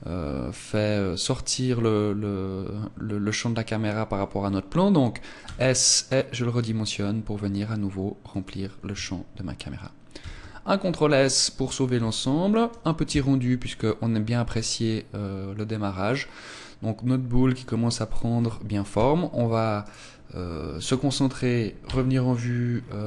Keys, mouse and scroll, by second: 8.5 click, 10.2 ctrl+s, 19.0 Escape, 19.9 right click, 21.9 KP_1, 22.8 scroll up 5.